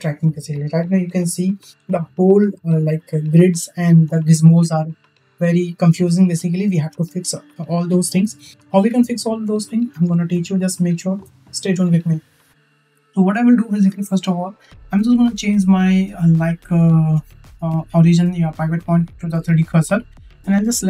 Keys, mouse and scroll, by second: 10.4-11.0 shift+middle drag, 15.1-19.8 drag.